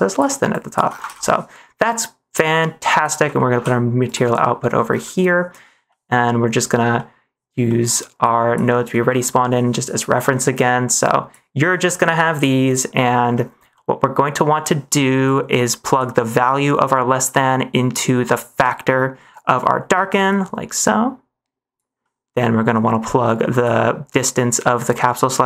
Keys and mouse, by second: 0.4 click, 1.0 ctrl+s, 1.3 middle click, 1.8 middle click, 2.5-3.1 drag, 3.4 g, 4.4 middle click, 5.1 middle click, 5.9 middle click, 7.0 middle click, 7.6 middle click, 8.1 click, 8.3 click, 8.8 middle click, 10.2 middle click, 10.9 click, 12.0 click, 12.6 drag, 12.9 middle click, 13.8 middle click, 15.2 click, 19.6 middle click, 20.2 click, 20.4-21.7 drag, 22.1 middle click, 23.2 click.